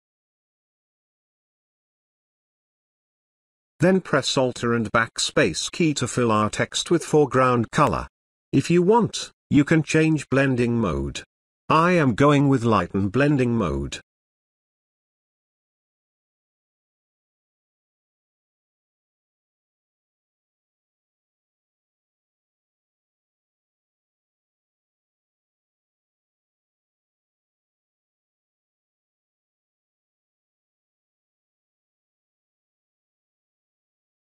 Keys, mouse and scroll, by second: 0.7 click, 2.4 ctrl+click, 4.2 ctrl+BackSpace, 4.9 ctrl+d, 6.6 space, 6.9-8.8 ctrl+drag, 9.2 space, 9.4-10.9 ctrl+drag, 17.9 Down, 26.2-28.4 drag, 33.0 click.